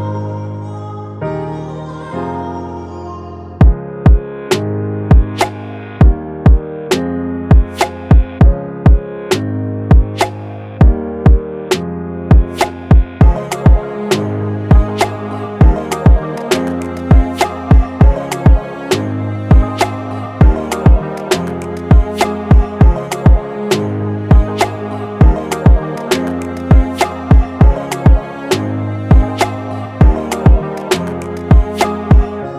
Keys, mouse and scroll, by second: 0.0 ctrl+z, 1.9 double click, 3.6 ctrl+z, 10.9-11.9 scroll down 1, 19.1-22.4 scroll up 1, 23.3 typing.